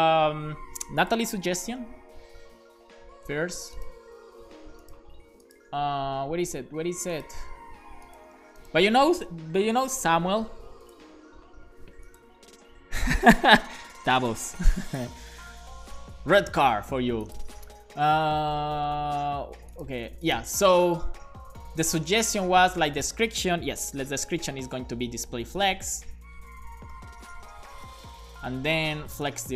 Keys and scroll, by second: 23.8 Return, 24.0-29.5 typing, 28.5 Return.